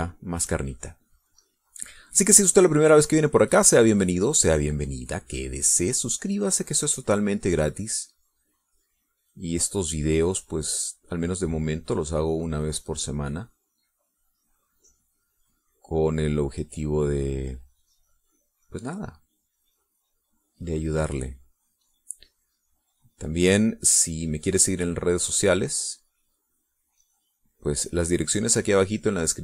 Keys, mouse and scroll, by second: 0.0 click, 0.5 middle click, 0.7 shift+click, 1.4 shift+middle click, 3.8-8.6 drag, 11.2-18.5 drag, 18.6-20.0 drag, 20.0-29.4 drag.